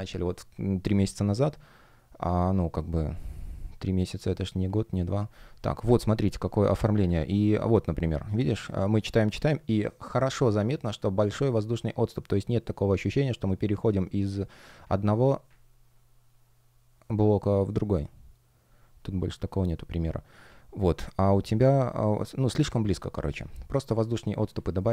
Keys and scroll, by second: 8.1 F1, 23.1 F1, 23.6 shift+o, 24.7 shift+g.